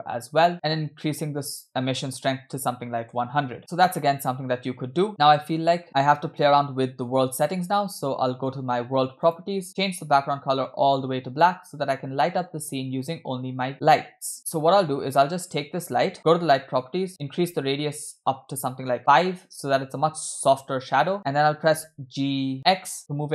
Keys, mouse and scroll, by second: 1.5-3.3 drag, 3.3 0, 3.6 scroll down 3, 3.6 space, 4.1-5.1 middle drag, 5.1-5.8 scroll up 1, 5.1 space, 6.9 scroll down 1, 6.9 space, 7.2-8.5 drag, 9.3 click, 9.7 click, 13.7 click, 14.3 middle click, 16.2 click, 17.1-19.0 drag, 20.6-21.7 scroll down 3, 21.8 g.